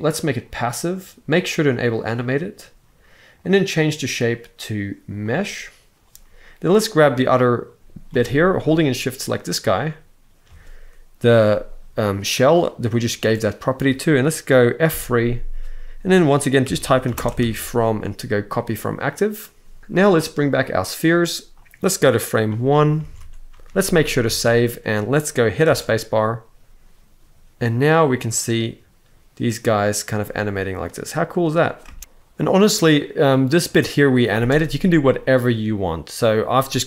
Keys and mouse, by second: 1.5 click, 3.1-5.1 drag, 6.5 click, 7.8 g, 8.2 right click, 9.1 shift+click, 14.6 F3, 21.2 click, 22.8 alt+a, 23.4 ctrl+s, 24.0 ctrl+s, 25.3 space, 31.6 space, 32.0 shift+Left, 32.0-34.0 drag, 34.0 space.